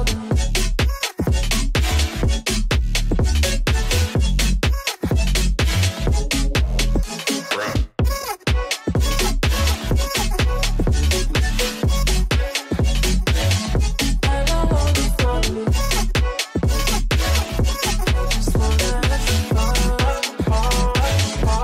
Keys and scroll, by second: 0.5 F4, 0.9 Escape, 4.9 Escape, 8.3 F3, 16.1 space, 16.5 F2.